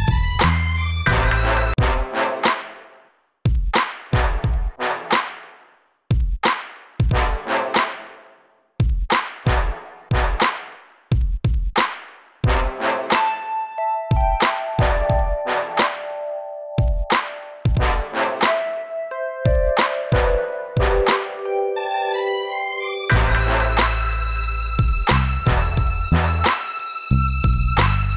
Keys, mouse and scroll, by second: 5.9-6.2 scroll up 4, 12.0 click, 12.9 right click, 13.4 scroll down 2, 14.6 middle click, 15.7 m, 17.0 scroll up 2, 18.4 click, 18.8 right click, 18.9 double right click, 19.5 click, 19.6 click, 19.8 click, 19.8 click, 21.0 scroll down 1, 22.1 click, 22.1 click, 23.0 scroll up 2, 24.1 click, 26.1 click.